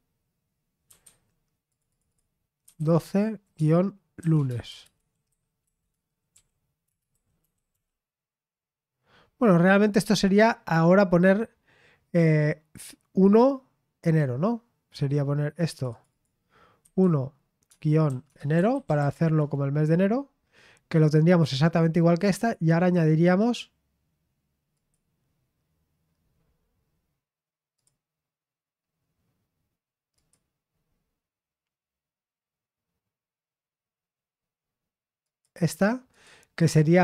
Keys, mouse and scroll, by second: 0.6-8.2 typing, 1.7 click, 10.1-12.3 scroll up 1, 12.3-14.0 scroll up 1, 14.0-14.6 scroll down 1, 15.7 click, 16.8-19.6 typing, 20.7-22.1 scroll up 1, 20.7 typing, 22.1-22.5 scroll down 1, 24.7 click, 27.8 click, 30.1 click, 35.2 click, 36.1 click.